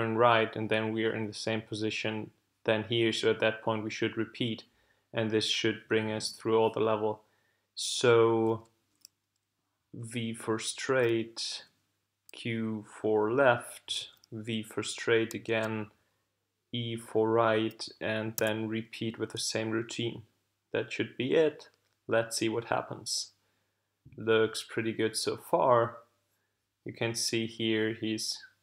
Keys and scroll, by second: 8.4 w, 10.9 q, 14.0 w, 15.5 e, 18.4 l.